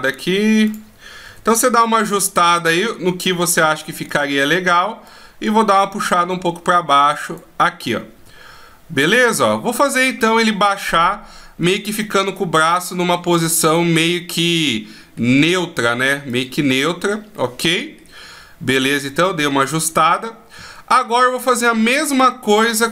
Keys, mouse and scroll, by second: 0.8 KP_3, 2.2 r, 4.7 click, 7.8 r, 8.9 middle click, 13.7 middle click, 15.9 click, 16.9 middle click, 18.7 click, 21.6 middle click.